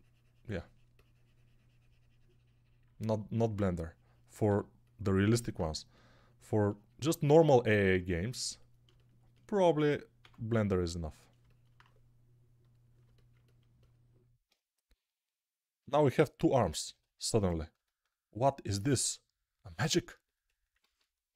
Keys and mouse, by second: 4.3 g, 10.1 q, 12.9-16.5 alt+drag, 15.7 g, 17.3 ctrl+s, 20.8 alt+q.